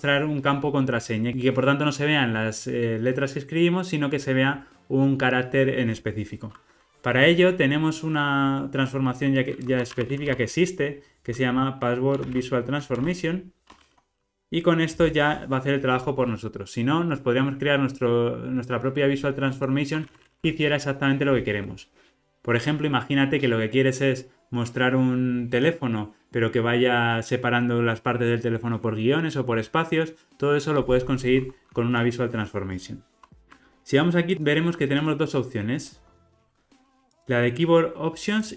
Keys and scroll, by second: 13.0 Return, 33.3 super+b, 36.5 alt+super+].